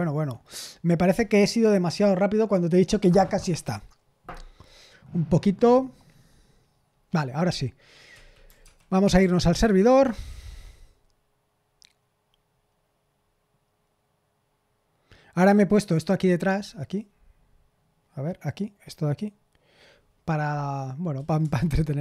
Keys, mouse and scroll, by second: 7.8-9.6 typing, 21.4 Return.